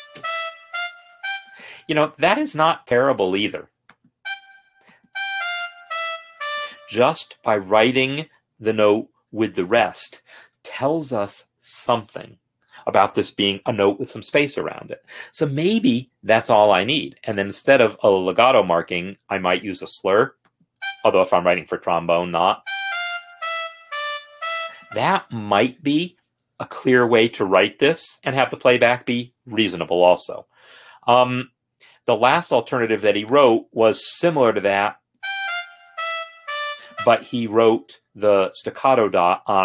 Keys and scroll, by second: 1.6 space, 5.1 space, 17.6 BackSpace, 18.8 s, 19.5 Escape, 22.7 space, 24.9 space, 35.2 space.